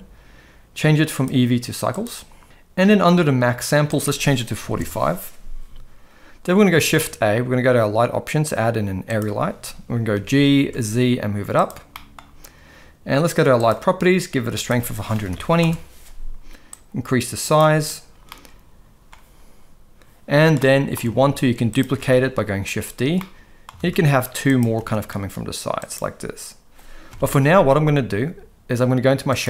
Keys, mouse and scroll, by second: 1.2-2.3 drag, 4.0 click, 6.8 shift+a, 10.1 g, 11.9 middle drag, 13.6 click, 14.7 click, 16.7 click, 18.3-19.1 middle drag, 20.6 middle click, 21.1 shift+d, 22.0 r, 23.1 middle click, 23.7 shift+d, 24.8 r, 27.1 KP_0.